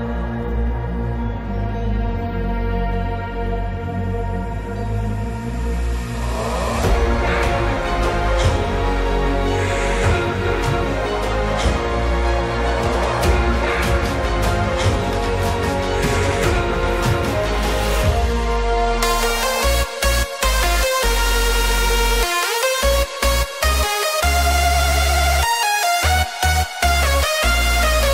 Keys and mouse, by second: 0.8 middle click, 2.1 shift+middle click, 3.2-7.3 middle drag, 5.4 click, 5.6 click, 6.0 click, 8.0 3, 9.8 alt+click, 11.3 alt+click, 12.1 middle click, 13.6-14.7 middle drag, 15.6 middle click, 18.0 shift+click, 18.6 middle click, 20.2 KP_Decimal, 22.0-23.1 shift+middle drag, 23.3-24.4 middle drag, 25.4 middle click, 26.8 shift+middle click.